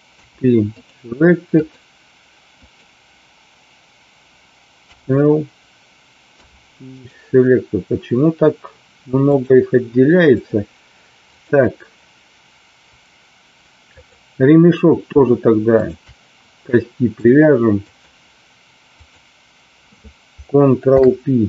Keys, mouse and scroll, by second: 0.0 p, 1.5 click, 2.7 click, 4.8 l, 6.3 p, 9.3-10.4 drag, 11.3 click, 13.9 click, 17.3 click, 19.1 click, 20.8 ctrl+p.